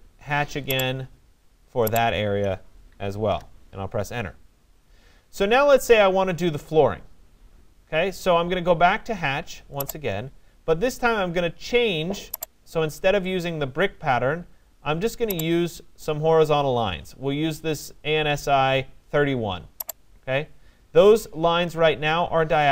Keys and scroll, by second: 3.0 Return.